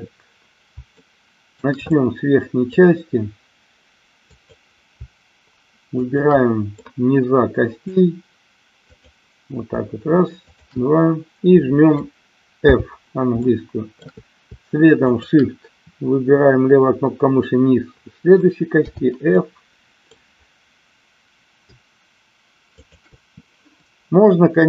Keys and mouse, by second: 0.9 shift+middle click, 1.9 middle click, 4.3 click, 6.0 shift+click, 6.8-7.9 middle drag, 8.8 click, 10.4 shift+click, 12.6 f, 13.4 shift+middle click, 18.8 f, 19.4 middle click, 22.8 shift+click.